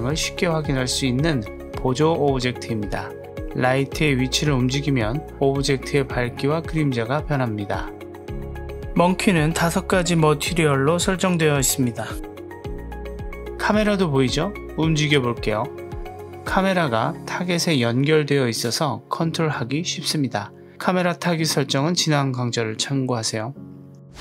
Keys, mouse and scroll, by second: 3.2 middle click, 3.3 scroll down 1, 3.5 g, 7.4 click, 7.4 click, 7.8 middle click, 9.3 click, 9.6 click, 9.9 click, 10.4 click, 13.4 g, 17.8 right click, 19.7 click, 20.2 g, 21.5-22.4 drag, 21.5 right click, 22.4-24.2 middle drag.